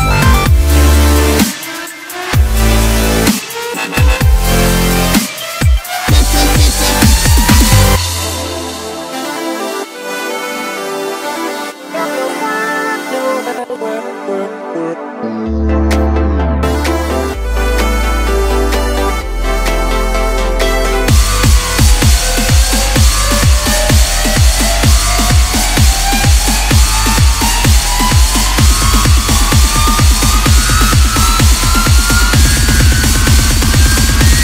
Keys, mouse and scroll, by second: 3.3 click, 4.0-5.5 middle drag, 5.5-6.7 drag, 6.7 scroll down 1, 7.0-7.8 middle drag, 7.8-8.3 scroll up 1, 8.3 click, 8.9 scroll down 1, 9.2-11.0 middle drag, 11.0 Delete, 11.9-12.5 middle drag, 12.5 click, 14.9 KP_1, 15.9-16.3 scroll up 1, 16.3 Tab, 16.8-18.1 middle drag, 18.1 3, 18.6-20.3 middle drag, 20.3 click, 22.3-23.9 middle drag, 23.9 shift+click, 26.0 x, 27.5-30.6 middle drag, 30.8 click, 32.3-33.5 middle drag, 33.5 shift+click, 34.0 shift+click.